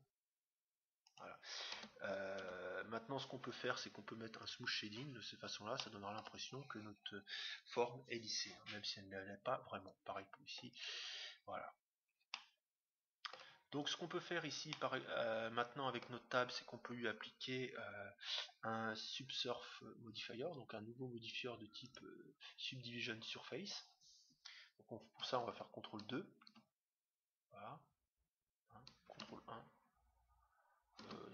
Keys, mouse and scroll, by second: 1.7 Tab, 2.4 Tab, 4.3-6.1 drag, 5.2-7.5 middle drag, 7.8 middle click, 9.1 middle click, 9.7-11.3 right drag, 10.6-12.2 drag, 11.9-14.0 middle drag, 13.7-15.1 right drag, 14.7-16.3 middle drag, 21.3-23.6 drag, 26.4 ctrl+2, 29.1 ctrl+1.